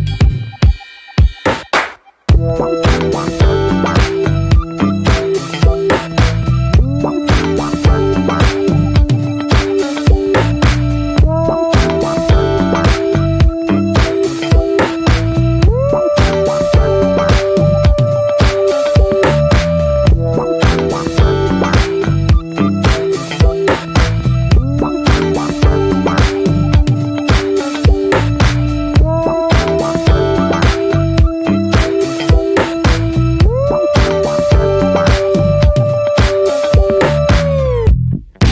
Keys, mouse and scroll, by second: 0.6 click, 1.3 middle click, 1.5 click, 1.9 middle click, 2.1 click, 2.4 middle click, 2.7 click, 3.3 middle click, 3.5 scroll up 1, 3.7 click, 4.1 middle click, 4.5 click, 5.1 middle click, 5.3 click, 5.7 middle click, 5.9-7.4 drag, 7.4 middle click, 7.7 click, 8.0 scroll down 2, 8.1 middle click, 8.3 click, 9.2 middle click, 9.6 click, 10.1 middle click, 10.4 click, 10.7 middle click, 11.2 click, 11.9 middle click, 12.1 click, 12.6 middle click, 12.8 click, 13.2 middle click, 13.4 click, 14.4 middle click, 14.6 click, 15.1 middle click, 15.4 click, 15.6 middle click, 16.0 click, 16.2 middle click, 16.5 click, 16.8 middle click, 17.2 click, 17.4 middle click, 17.5 scroll up 1, 17.6 click, 18.3 middle click, 18.7 click, 18.9 middle click, 19.4 click, 19.7 middle click, 20.0 click, 20.5 middle click, 20.7 click, 21.0 shift+middle click, 21.5 click, 22.3 middle click, 22.5 click, 22.7 middle click, 22.9-24.3 drag, 24.3-24.7 scroll down 2, 24.8 scroll up 1, 24.9-26.0 middle drag, 26.0 click, 26.3 click, 27.0 click, 27.3-27.8 shift+middle drag, 27.8 drag, 27.9-29.4 middle drag, 29.4 scroll up 1, 29.5-30.1 shift+middle drag, 30.1 ctrl+s, 30.3 click, 30.4 scroll up 1, 30.5 alt+middle click, 30.9 shift+middle click, 31.0-31.3 scroll up 1, 31.3 ctrl+s, 31.5-31.9 drag, 32.3 alt+middle click, 33.3-33.9 scroll up 4, 33.4 shift+middle click, 33.9 shift+middle click, 34.4 click, 34.6 scroll up 1, 34.8 shift+middle click, 35.2 f, 35.8 shift+middle click, 36.2 f.